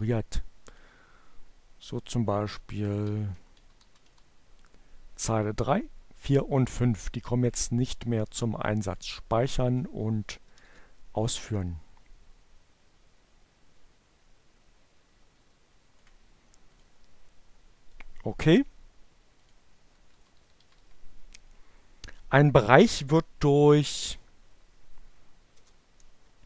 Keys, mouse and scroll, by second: 0.3 click, 2.2 Down, 2.3 Left, 2.8 Down, 2.9 Left, 7.9 click, 9.3 click, 10.4 Up, 10.5 Return, 15.8 click, 18.4 click, 18.7 Delete, 19.5 Down, 19.6 Delete, 20.0 Down, 20.1 Delete, 23.3 Up, 23.5 Return, 25.8-26.4 typing.